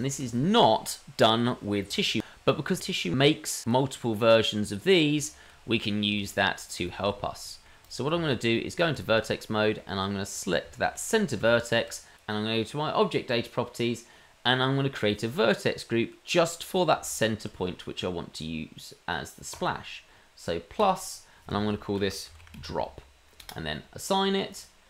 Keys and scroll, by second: 8.1 Tab, 10.9 Tab.